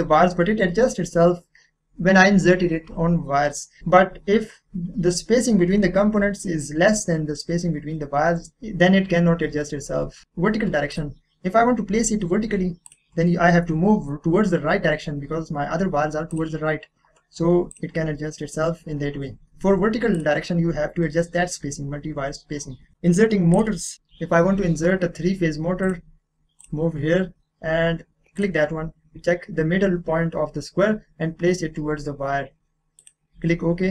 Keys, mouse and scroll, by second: 3.1-3.5 scroll down 1, 3.5 middle click, 3.9-4.6 scroll up 1, 8.5-8.9 scroll down 1, 8.9-10.0 scroll up 1, 10.0 scroll down 1, 10.2 click, 11.5-12.3 scroll up 1, 14.3 click, 16.3 click, 19.3 scroll down 1, 19.4 click, 22.9 scroll down 1, 23.1 middle click, 23.5 click, 25.8 click, 28.3 click, 28.8 scroll up 1, 33.0 click.